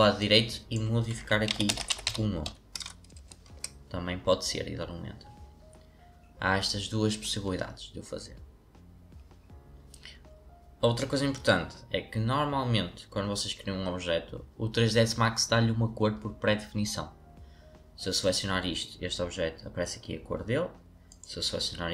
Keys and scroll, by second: 1.2-3.3 typing, 3.4 Return.